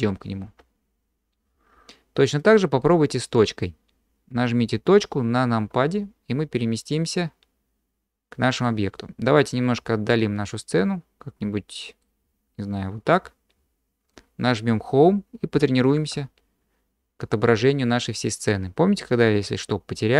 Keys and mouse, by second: 2.8-3.6 drag, 5.7 KP_Decimal, 7.0-8.6 middle drag, 10.8-12.0 middle drag, 16.1 Home.